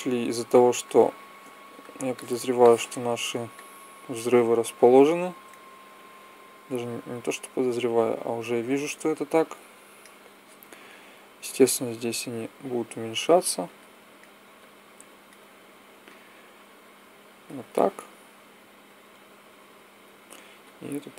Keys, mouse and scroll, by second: 4.7 click, 6.5-7.6 drag, 9.4 KP_0, 11.3 s, 14.3 click, 18.2-19.2 drag, 20.3-21.1 drag.